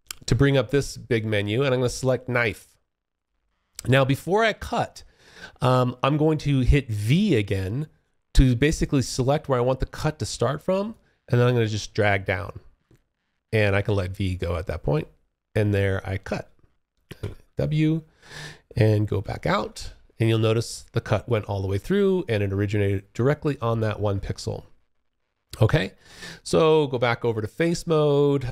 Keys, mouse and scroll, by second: 2.3 click, 7.2-12.0 v, 16.4 w, 17.9 space, 18.3 1, 18.9 alt+click, 22.0 alt+click, 23.4 alt+click.